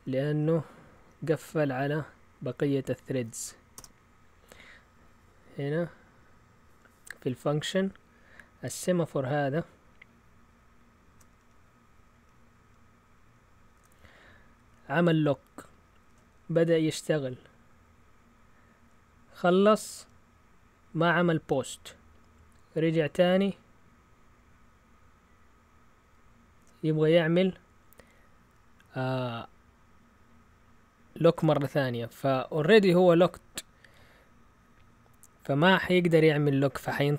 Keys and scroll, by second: 0.2 Up, 0.9 Up, 1.3 Up, 3.1 Up, 3.7 Return.